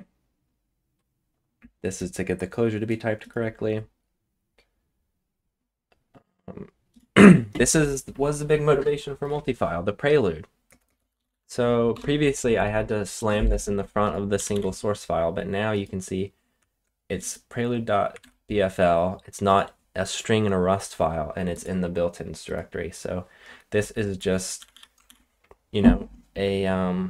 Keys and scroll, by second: 10.6-12.4 typing, 14.3 typing, 18.1 super+1, 24.5 typing.